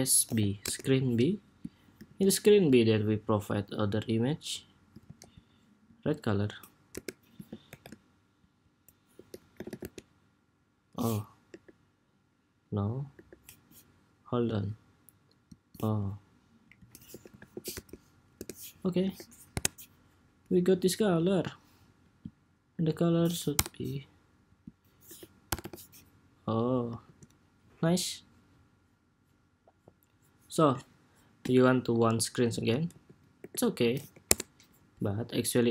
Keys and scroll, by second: 1.8 super+s, 4.8 super+c, 7.4 shift+super+v, 26.8 super+s, 32.6 super+d, 33.1 super+r.